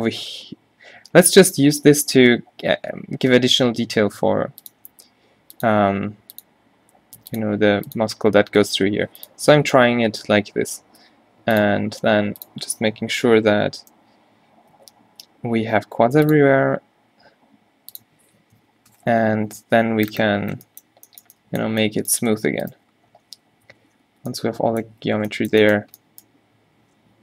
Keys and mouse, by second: 11.1 k, 14.9 k, 23.8-26.0 middle drag, 23.8 z, 24.2 b, 25.2 z, 26.0 q.